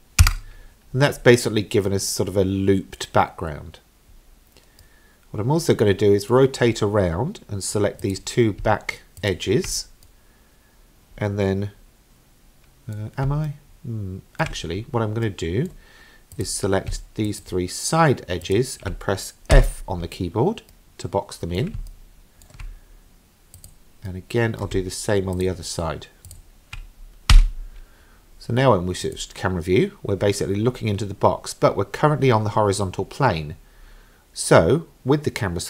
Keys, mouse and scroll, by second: 4.8-6.3 middle drag, 6.6-8.0 scroll down 4, 8.0 click, 9.2 shift+click, 10.1-13.0 middle drag, 13.5-14.5 shift+middle drag, 15.3 middle click, 16.4 click, 17.3 shift+click, 18.4 shift+click, 19.6 f, 20.7 middle click, 21.9 shift+middle click, 23.6 click, 24.1 middle click, 25.4 shift+click, 26.3 shift+click, 27.3 f, 29.0 click, 33.6-34.1 scroll down 3.